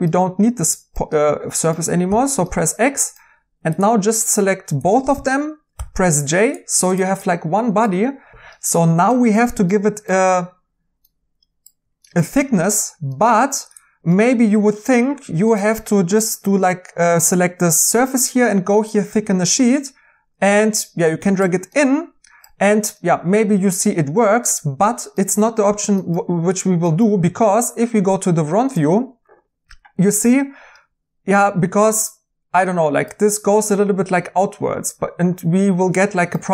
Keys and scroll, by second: 2.0 x, 5.7 j, 36.3 2.